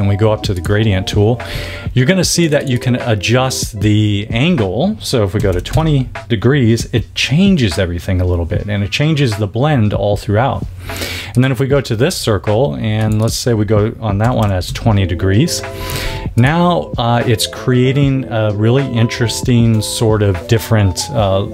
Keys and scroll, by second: 5.1-5.9 typing, 14.2 2, 14.6 Tab.